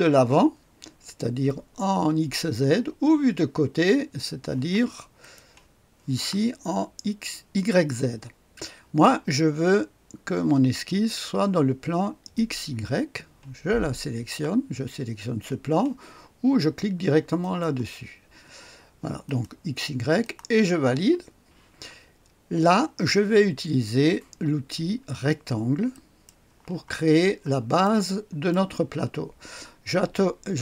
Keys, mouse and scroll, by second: 5.1 click, 12.3 click, 17.3 click, 19.2 click, 20.1 click, 25.8 click, 26.9-27.8 scroll down 1, 27.8 right click, 28.5 click.